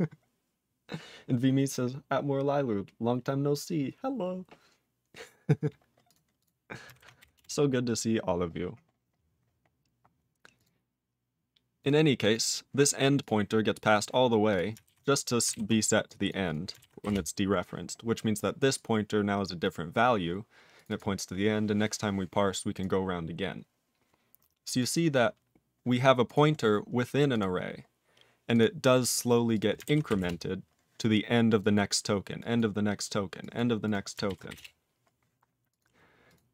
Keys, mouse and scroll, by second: 6.1 click, 6.4 click, 7.3 Return, 9.7-10.1 scroll down 1, 10.6 click, 11.8 click, 12.2 click, 13.2 click, 14.5 click, 16.1 click, 16.3 click, 16.5 click, 17.1 Return, 18.7 click, 19.6 click, 20.7 click, 20.9 double click, 22.7 click, 22.8 click, 24.8 click, 26.2 click, 26.5 scroll up 4, 27.3 click, 27.9 scroll down 3, 28.6 click, 29.6 click, 30.2 Return, 31.6 click, 31.8 click, 32.4 click, 32.6 click, 33.4 click, 33.6 click, 33.8 click, 34.5 Return, 35.7 click, 36.3 click.